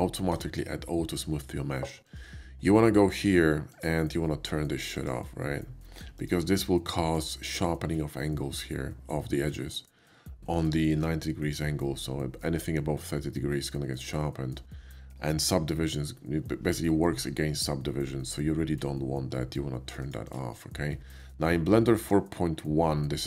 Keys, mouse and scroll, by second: 1.9 click, 3.6 click, 4.9 click, 6.1 click, 7.1 click, 10.4 middle click, 10.8 shift+middle click, 12.0 shift+middle click, 14.0-14.4 middle drag, 19.8 click, 20.3 click, 20.8-21.2 middle drag, 21.6-22.0 middle drag, 23.1 click.